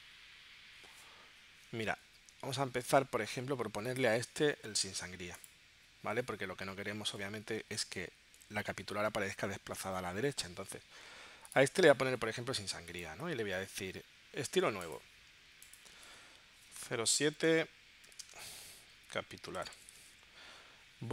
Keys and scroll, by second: 17.2 0, 18.1 ., 20.3-21.1 typing.